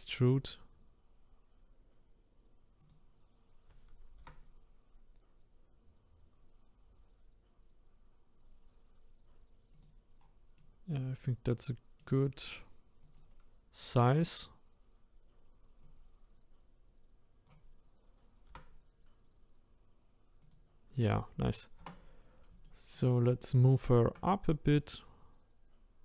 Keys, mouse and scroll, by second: 4.2 r, 10.2-10.5 scroll down 4, 10.5-13.2 middle drag, 13.2 click, 14.8-15.5 scroll up 2, 16.0 click, 18.5 r, 20.9-21.8 scroll down 1, 21.8 Tab, 22.6-24.7 shift+middle drag, 24.7 click.